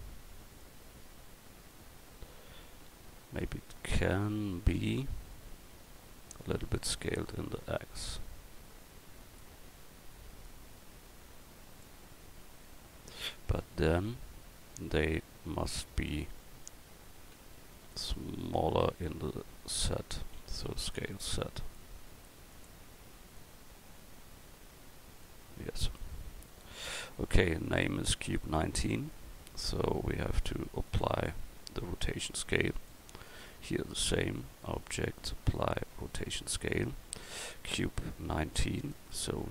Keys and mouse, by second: 6.5 s, 10.4-13.8 drag, 13.8 Tab, 16.1 right click, 17.2 k, 18.5 l, 19.3 l, 19.7 l, 20.7 s, 25.6 Tab, 33.3-34.0 right drag, 37.2-38.9 right drag.